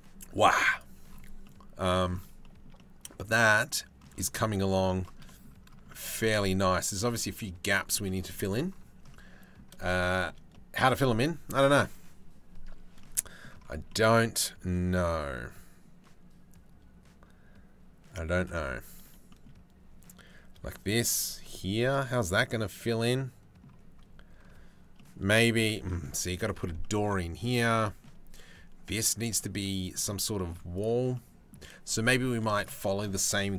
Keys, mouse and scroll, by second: 0.3 middle click, 1.1 middle click, 2.0 shift+middle click, 2.4-4.4 drag, 4.6 shift+middle click, 4.9 click, 5.5-6.9 shift+middle drag, 7.3 middle click, 7.7 middle click, 8.8 middle click, 9.7 shift+middle click, 10.2 middle click, 12.6 middle click, 13.5 click, 14.6-17.4 drag, 17.8 middle click, 18.9 shift+middle click, 20.4 shift+middle click, 21.3-22.5 middle drag, 22.7 middle click, 25.3 shift+right click, 26.4 shift+right click, 26.8 middle click, 29.2 middle click, 30.0 shift+middle click, 30.8-32.1 middle drag, 33.4 KP_7.